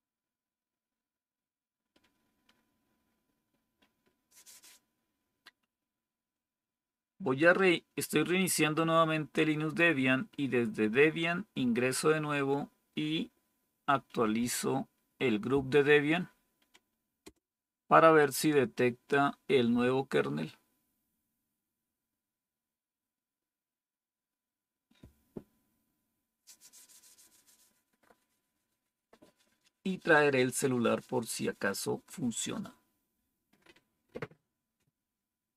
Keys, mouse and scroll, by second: 13.9 Up, 14.1 Up, 17.2 Return.